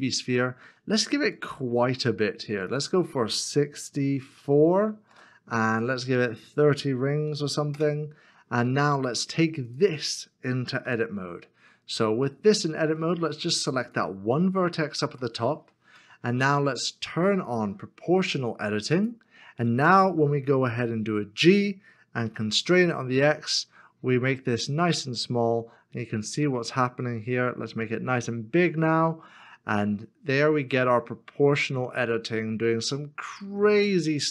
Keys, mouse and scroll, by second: 4.3 KP_4, 4.3 KP_6, 5.1 Return, 7.2 KP_3, 7.7 Return, 7.7 KP_0, 10.8 Return, 11.8 scroll up 1, 12.6 shift+middle click, 15.2 middle click, 16.2 shift+middle click, 20.7 g, 22.9 z, 23.0 scroll down 1, 23.6-27.2 scroll up 1, 27.4-27.8 scroll down 1.